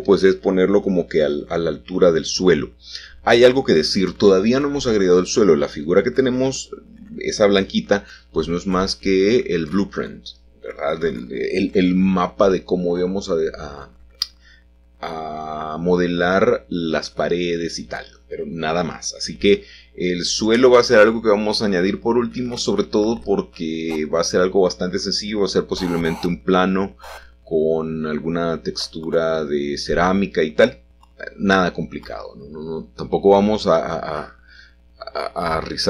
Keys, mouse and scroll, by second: 1.1 shift+d, 1.8 Tab, 3.5 Escape, 4.5 g, 5.2 z, 6.9 click, 7.8 s, 8.0 z, 10.7 click, 11.6 g, 12.3 z, 15.6 shift+click, 16.0-18.6 middle drag, 20.9 i, 22.8-23.8 scroll down 1, 23.8-24.6 scroll down 1, 24.6 middle click, 26.9 a, 27.0 a, 27.9 shift+a, 29.7 click, 30.9 g, 31.8 shift+z, 33.1 click, 33.6 s, 34.7 s.